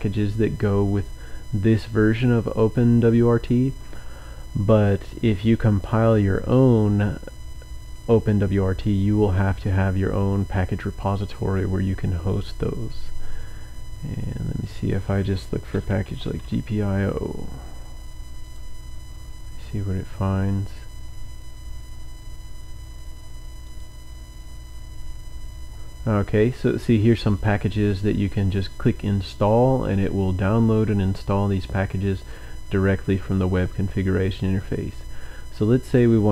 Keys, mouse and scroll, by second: 6.6 scroll down 2, 11.0 scroll down 2, 11.8 scroll down 2, 12.6-13.2 scroll down 2, 13.2-13.5 scroll up 2, 14.8 click, 15.7-16.9 typing, 18.4 click, 21.2-21.7 scroll down 2, 22.5-23.0 scroll down 2, 23.7 click, 25.0-25.3 scroll down 1, 25.8-26.2 scroll down 1, 31.5-32.9 scroll up 2, 32.9-33.7 scroll down 3, 35.6 click.